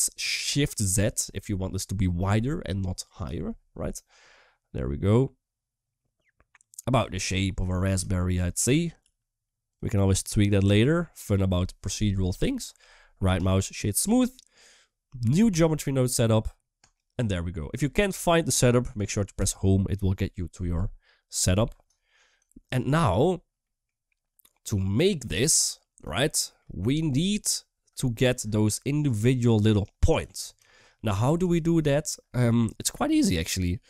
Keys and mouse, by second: 0.0 s, 7.1 middle drag, 7.5 3, 7.9 shift+drag, 9.4 s, 9.8 middle click, 10.4 Tab, 12.8 middle drag, 15.3 click, 16.6 click, 19.7 Home, 22.3 shift+middle drag, 23.4 middle click, 26.1 shift+middle drag, 28.8 click, 28.8 d, 29.5 d, 30.1 d, 30.4 shift+middle drag, 31.3 shift+middle drag, 31.7 middle click.